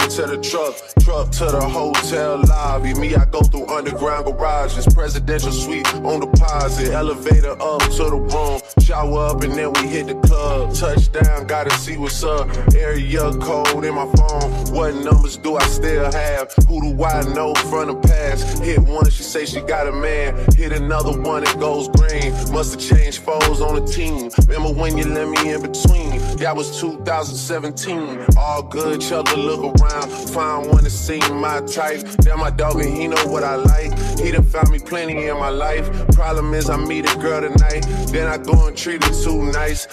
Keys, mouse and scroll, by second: 16.4-20.8 middle drag, 20.8 r, 22.8 ctrl+z, 23.8 click, 23.8 r, 26.5 click, 27.8-30.3 middle drag, 30.3-31.8 drag, 32.2 shift+d, 33.0 ctrl+a, 33.7 click, 35.9 shift+d, 36.6 ctrl+a, 38.6 middle click, 39.6 click.